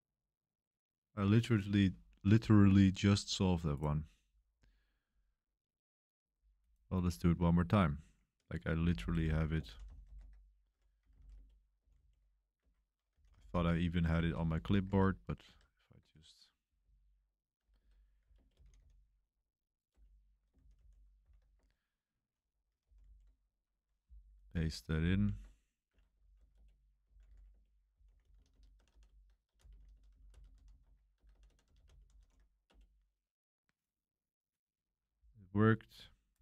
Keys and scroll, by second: 8.4-11.8 typing, 11.9 super+v, 12.6 Escape, 12.8-13.6 typing, 14.2 super+1, 14.8 super+2, 14.8 typing, 14.9 super+3, 15.5 super+3, 16.6-19.2 typing, 19.9 Return, 20.5-21.8 typing, 21.6 super+1, 21.8 Return, 21.8 super+1, 22.8 i, 23.0 super+v, 25.0 super+v, 25.9-33.1 typing.